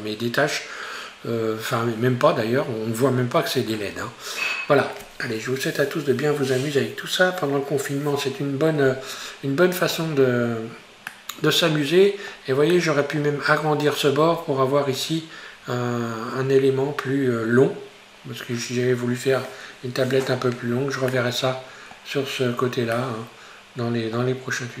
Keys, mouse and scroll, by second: 4.1 scroll down 1, 11.2-14.3 middle drag, 14.3 scroll up 2, 16.6-16.9 scroll down 2, 21.1-24.8 middle drag.